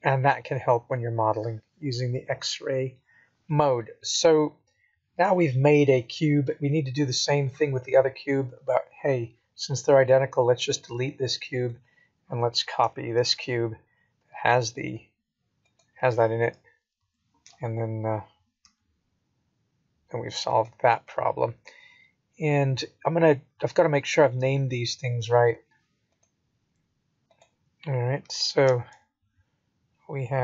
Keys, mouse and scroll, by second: 7.2 click, 10.0 x, 11.5 click, 13.2 shift+d, 16.9 KP_7, 18.6 g, 27.5 shift+middle click.